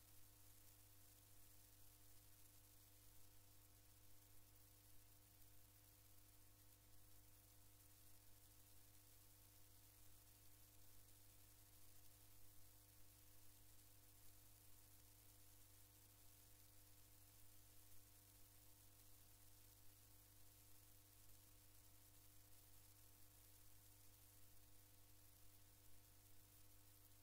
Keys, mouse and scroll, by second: 1.4 click, 3.1 click, 8.5-12.2 drag, 13.8 click, 16.9 ctrl+click, 18.3 ctrl+click, 19.5 ctrl+click, 20.8 ctrl+click, 24.2 click.